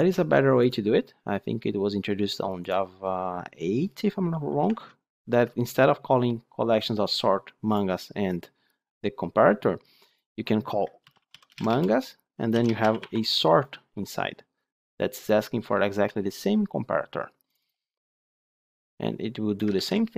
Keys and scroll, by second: 4.6 Tab, 19.7 ctrl+c.